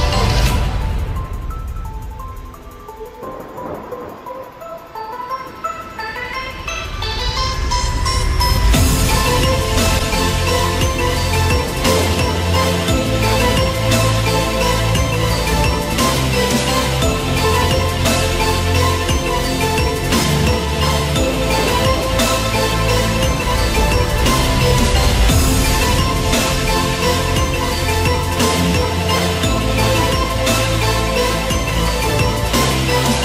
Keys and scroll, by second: 3.3 ctrl+0.